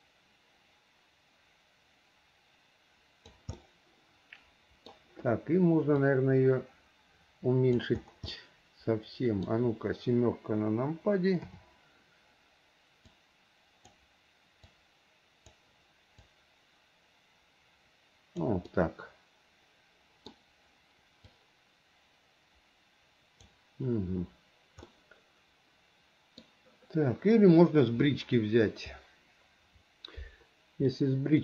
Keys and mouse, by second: 3.7-5.0 middle drag, 6.1-8.0 drag, 8.5-9.6 middle drag, 11.6 KP_7, 13.3 click, 15.0 click, 16.8-18.6 drag, 18.8-20.5 middle drag, 21.4-23.6 drag, 25.0-26.6 middle drag, 31.1-31.4 middle drag.